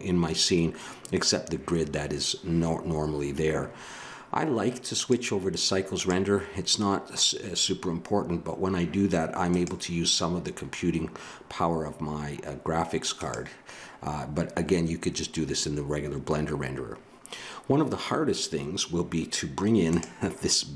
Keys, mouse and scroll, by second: 5.0-6.8 drag, 9.5-11.1 drag.